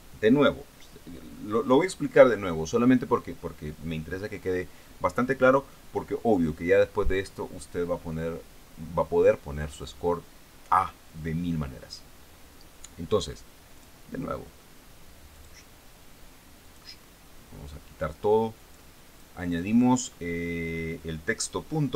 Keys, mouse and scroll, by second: 14.2 click, 15.8 click, 17.1 click, 19.0 click.